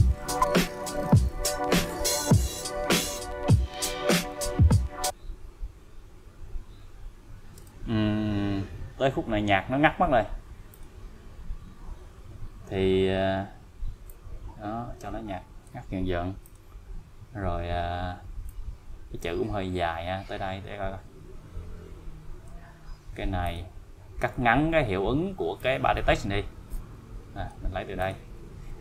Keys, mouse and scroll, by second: 7.6 space, 8.5-10.6 scroll down 1, 10.7 click, 11.8-12.4 scroll up 1, 14.1-14.4 scroll up 1, 14.4-16.0 click, 18.5-22.5 click, 23.4 click, 25.6-27.8 click.